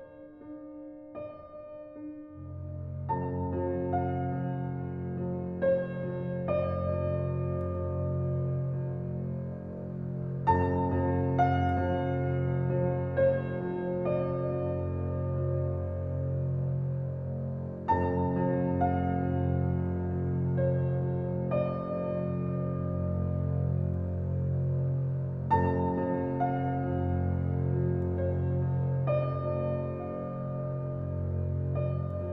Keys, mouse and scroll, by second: 0.0 r, 1.1-2.9 drag, 2.9 alt+right click, 3.3 alt+click, 3.9 alt+right click, 5.2-11.5 drag, 11.5 alt+click, 12.5 alt+right click, 13.6 click, 13.7 click, 14.8 right click, 15.8 click, 16.4 alt+right click, 16.7 alt+click, 17.4 alt+right click, 17.6 alt+click, 17.8 alt+click, 18.3 alt+right click, 18.5 alt+click, 19.0 alt+right click, 19.4 alt+click, 20.5 alt+click, 20.9 alt+right click, 21.4-27.4 alt+drag, 27.4 alt+right click, 27.6 alt+click, 28.0 alt+right click, 28.3 alt+click, 28.8 click, 30.0 right click.